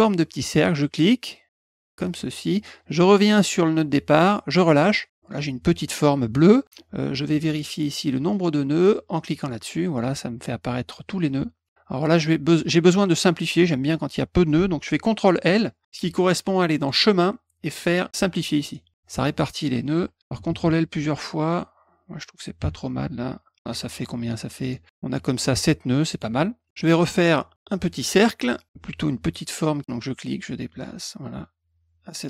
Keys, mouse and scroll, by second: 0.7-4.5 drag, 9.3 click, 16.7 click, 18.6 click, 20.2 ctrl+l, 20.3 ctrl+l, 20.5 ctrl+l, 20.6 ctrl+l, 21.0 ctrl+l, 22.6 ctrl+l, 24.3 click, 26.1 click, 26.6 middle click, 29.8-32.2 drag.